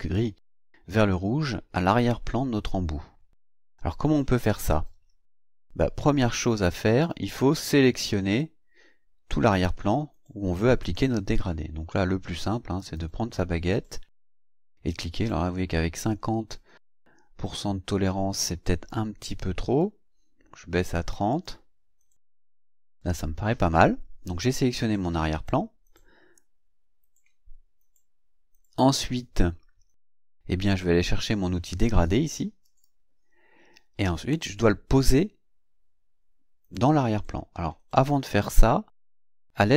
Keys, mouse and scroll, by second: 6.2-7.3 drag, 12.8 click, 13.7 click, 18.9 click, 20.7 click, 21.3 click, 32.6 click.